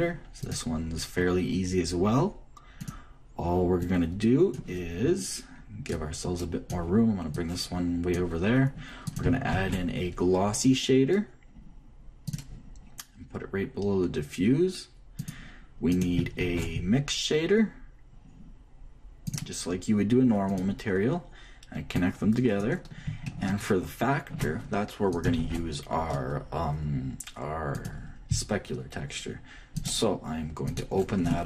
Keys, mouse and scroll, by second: 1.1-3.0 drag, 3.5-6.4 drag, 6.7-11.5 drag, 10.2 shift+a, 16.6-18.3 shift+drag, 17.1 shift+a, 22.7-24.5 drag, 25.8-27.7 shift+drag, 26.1 shift+a, 31.4 click.